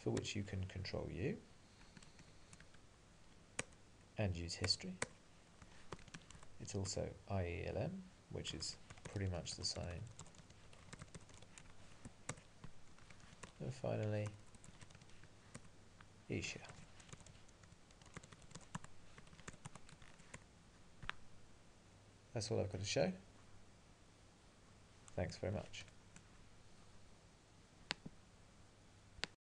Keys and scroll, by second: 2.2 ctrl+:, 2.7 Up, 3.7 Return, 5.7 alt+x, 6.4 Tab, 6.9 Return, 12.3 Return, 15.6 Return, 15.6 alt+x, 18.8 Tab, 20.4 Return.